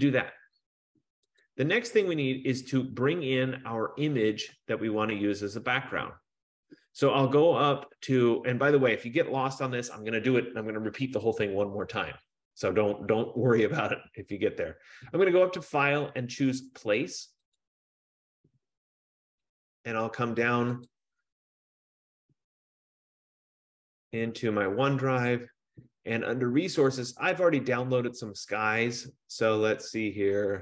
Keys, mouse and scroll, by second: 1.7 click, 8.6 click, 17.8 click, 21.0 click, 27.0 click, 27.2 click.